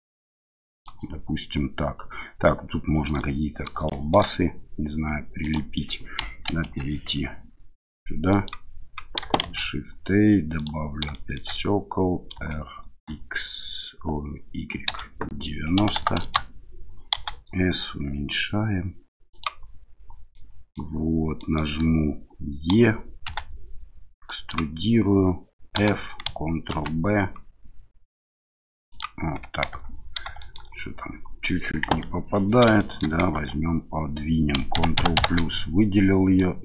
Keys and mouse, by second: 3.2 middle click, 3.9 shift+middle click, 5.4 click, 6.2 KP_1, 6.6 KP_3, 8.3 click, 9.4 shift+a, 11.1 shift+click, 12.3 r, 12.8 x, 14.9 y, 15.8 KP_9, 15.9 KP_0, 16.2 KP_Enter, 17.1 s, 19.3 click, 20.3 middle click, 21.4 middle click, 22.7 e, 23.3 x, 24.3 click, 25.8 f, 26.7 ctrl+b, 28.9 click, 29.7 Tab, 30.4 shift+drag, 31.8 KP_1, 32.8 shift+drag, 33.3 Tab, 34.7 ctrl+KP_Add, 36.3-36.6 drag.